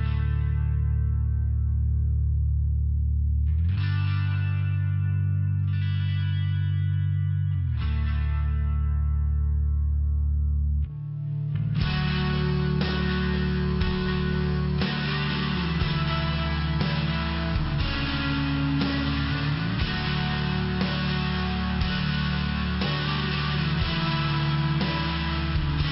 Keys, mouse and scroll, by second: 0.1 click, 0.2 click, 0.5 click, 1.1 click, 1.8 click, 2.1 click, 2.6 click, 2.7 double click, 3.1 double click, 3.7 double click, 4.3 click, 5.1 click, 8.1 click, 8.7 click, 9.3 click, 9.8 click, 10.5 click, 11.0 click, 11.1 double click, 11.4 double click, 12.5 click, 13.1 click, 14.1 click, 14.9 click, 15.6 click, 16.6 click, 18.6 click, 19.5 click, 19.9 click, 20.4 click, 20.8 click, 21.3 click, 21.8 click, 22.4 click, 22.9 click, 23.4 click, 24.0 click, 24.5 click.